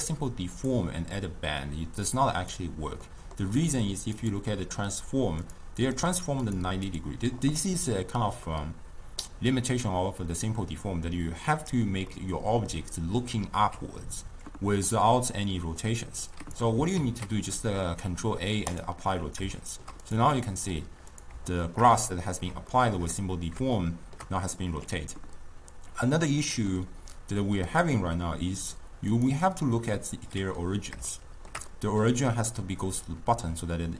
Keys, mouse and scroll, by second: 2.1-3.1 drag, 3.1-4.2 middle drag, 4.2 click, 5.5 click, 6.0 click, 6.5 click, 6.9 click, 8.5-11.6 middle drag, 12.2-15.2 middle drag, 16.3 click, 17.0 ctrl+a, 19.6 shift+scroll down 1, 19.6-20.1 shift+middle drag, 20.1 drag, 20.5-21.2 middle drag, 21.2 click, 21.6-27.7 shift+middle drag, 27.7-30.1 drag, 30.1-33.9 middle drag.